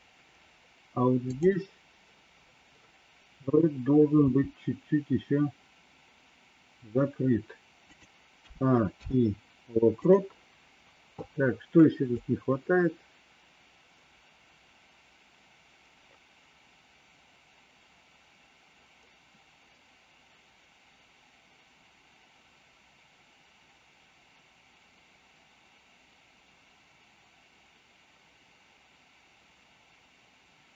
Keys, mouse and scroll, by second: 1.3 click, 4.2 r, 8.3 a, 8.8 i, 12.1-30.7 drag.